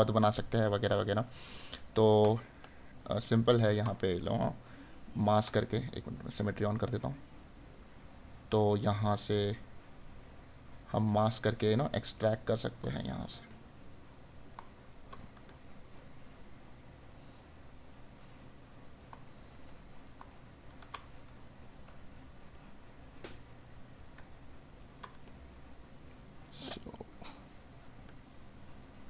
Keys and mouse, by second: 1.7 right click, 12.9 right click, 14.7 right click, 19.2 right click, 24.3 right click.